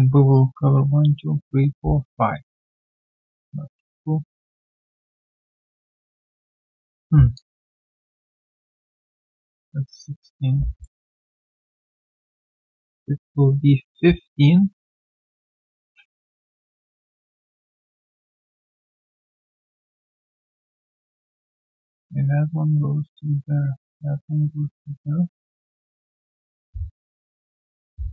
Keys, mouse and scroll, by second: 8.9 double click, 10.8 middle click.